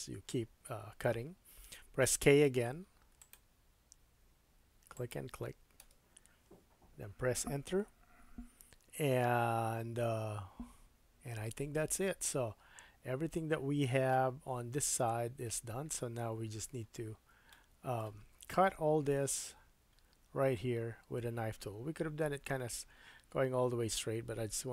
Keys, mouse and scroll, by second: 2.0 k, 16.0-24.7 middle drag, 16.8-17.3 scroll up 3.